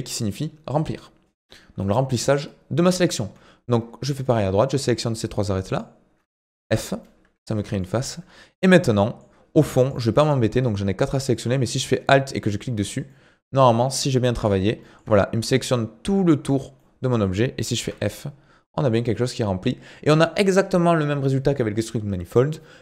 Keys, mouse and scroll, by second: 1.8-3.0 middle drag, 3.0 click, 4.2 shift+click, 4.7-5.7 shift+middle drag, 5.7 shift+click, 6.6 f, 7.0-8.2 middle drag, 8.2 scroll up 3, 8.8 middle click, 9.8 click, 10.1-12.3 middle drag, 12.3 alt+click, 12.9 scroll down 1, 13.1-14.4 middle drag, 14.4-14.8 scroll up 4, 14.8-17.8 shift+middle drag, 17.8 f, 18.0 middle click, 19.0 Tab, 19.2 middle click, 19.9-22.8 scroll up 1.